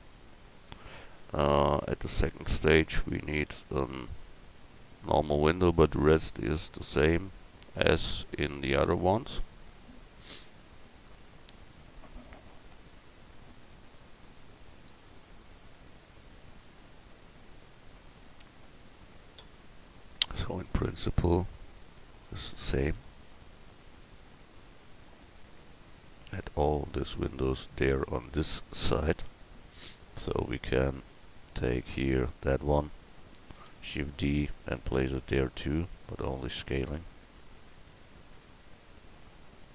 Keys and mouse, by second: 8.7 middle click, 9.4-15.2 middle drag, 17.5-18.1 middle drag, 27.2 click, 29.1 KP_1, 33.5 shift+d, 37.7 s.